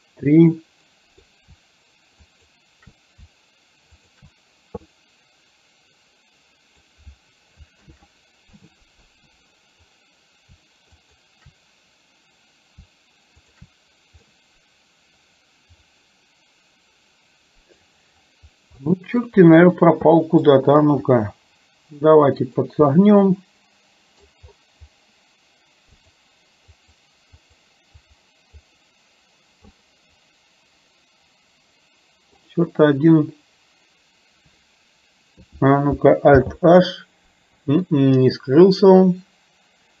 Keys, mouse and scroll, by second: 2.5 shift+click, 5.0-7.0 middle drag, 8.0 ctrl+z, 11.0 shift+click, 14.4-17.9 middle drag, 18.9-19.2 middle drag, 20.2 middle click, 21.1 r, 23.0-24.4 middle drag, 26.0 click, 26.9 click, 27.4 click, 28.0-28.9 drag, 29.7-32.5 middle drag, 36.4 alt+h, 38.0-40.0 middle drag.